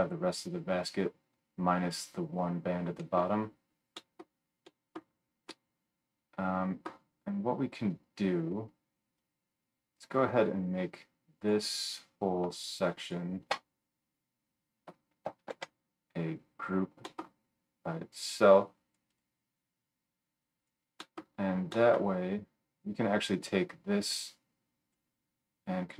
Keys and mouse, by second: 12.9 shift+middle click, 15.6 ctrl+g, 16.8-18.2 right drag, 18.2-19.2 middle drag, 19.2 right click, 19.6-25.9 middle drag.